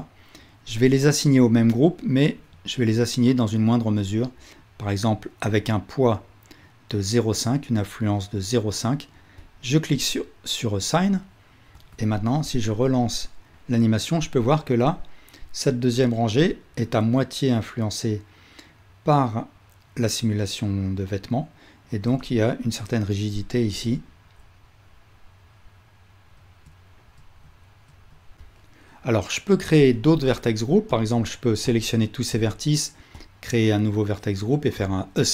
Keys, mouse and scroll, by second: 2.4-31.1 drag, 11.8 Tab, 12.5 space, 28.0 space, 30.3 Tab, 31.7 ctrl+click, 33.2-35.3 drag.